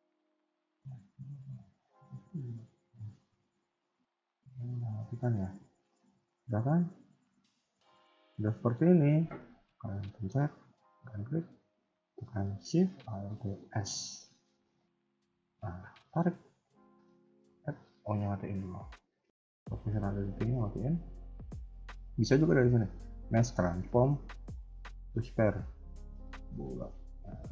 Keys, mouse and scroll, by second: 0.5 click, 1.4 scroll up 2, 2.6 click, 2.6-3.6 scroll up 3, 3.8 click, 4.3 middle click, 5.5 KP_1, 5.9 scroll up 2, 6.2 middle click, 7.3 scroll down 2, 7.6 shift+middle click, 8.0 middle click, 13.6 alt+shift+s, 18.2 o, 20.1 click, 21.3 click.